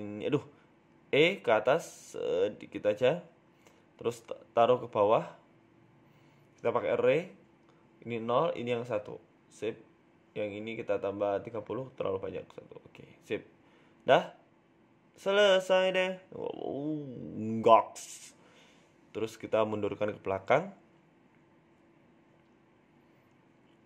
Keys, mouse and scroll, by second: 0.6 click, 1.2 right click, 1.8 ctrl+z, 2.2 KP_1, 2.6-3.0 scroll up 4, 2.8 shift+middle click, 3.2 e, 4.7 scroll down 2, 4.9 shift+middle click, 5.3 Tab, 5.5 scroll down 3, 6.1 g, 8.3 click, 9.5 click, 10.2 Tab, 12.0 click, 13.7 click, 14.2 middle click, 14.5 scroll down 1, 15.0-15.4 scroll down 2, 15.0 z, 15.6 middle click, 15.8 scroll up 5, 16.1 middle click, 17.4 shift+middle click, 18.3 g, 19.9-20.5 scroll down 4, 20.5 shift+right click, 21.1 g.